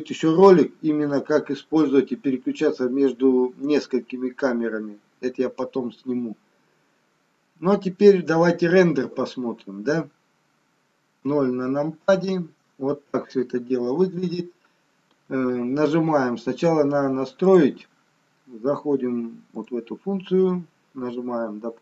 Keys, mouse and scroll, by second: 11.2 KP_0, 17.7 click, 20.0 click.